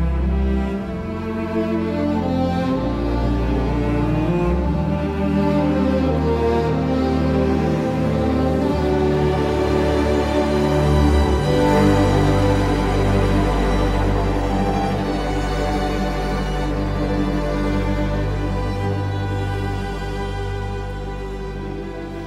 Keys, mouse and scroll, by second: 0.0 space, 7.1 KP_9, 7.6 Return, 19.7-20.9 typing, 21.1 Return.